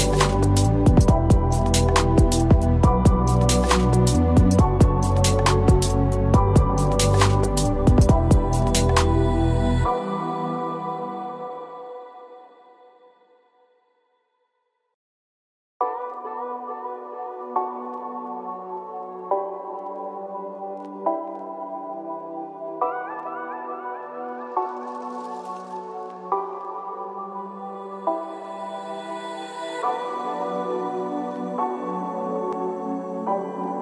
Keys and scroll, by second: 16.1 ctrl+=.